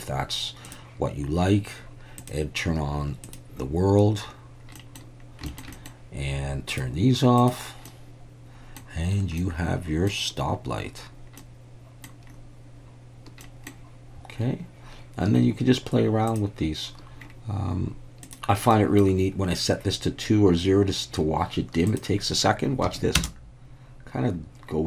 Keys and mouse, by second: 2.2-3.6 drag, 4.8 middle click, 5.5 shift+middle click, 5.7 middle click, 6.7 click, 7.4 click, 7.9-8.8 middle drag, 9.4-10.1 middle drag, 11.4-12.1 middle drag, 13.4 middle click, 16.3 click, 18.3 click, 18.7 middle click, 22.0-23.3 drag.